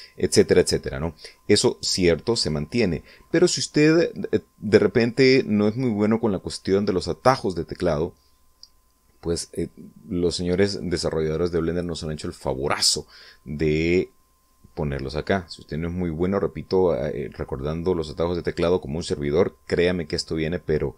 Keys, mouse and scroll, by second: 0.9-2.7 middle drag, 3.0-3.3 scroll up 1, 10.5-10.9 scroll down 2, 11.0-12.5 middle drag.